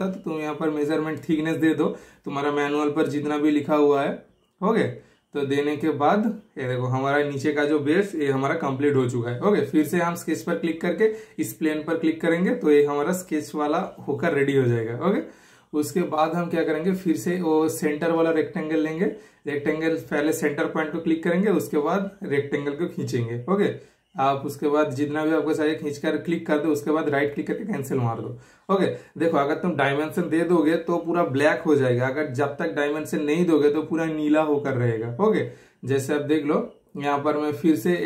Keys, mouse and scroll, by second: 5.2 super+Return, 7.4-10.7 shift+super+middle drag, 10.7 super+click, 17.5 super+scroll down 1, 17.7 super+click, 26.7 right click, 26.7 super+click, 27.8 super+click, 36.9 super+click, 36.9 typing.